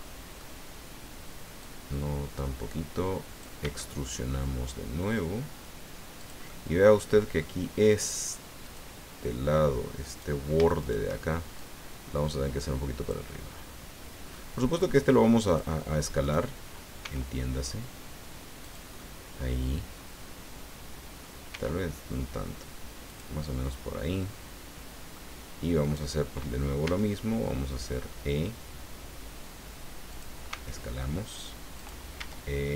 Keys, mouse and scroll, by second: 1.6-3.6 drag, 3.6 e, 6.2-7.6 drag, 8.6 click, 10.1 right click, 10.8 shift+right click, 11.6-13.3 drag, 13.3-14.5 middle drag, 15.5 click, 16.2 right click, 17.0 s, 18.6 click, 18.9-21.4 middle drag, 21.5 s, 23.1 click, 23.5-25.3 drag, 25.8 right click, 26.8 e, 30.1 click, 30.5 s, 31.8 click, 32.2 e.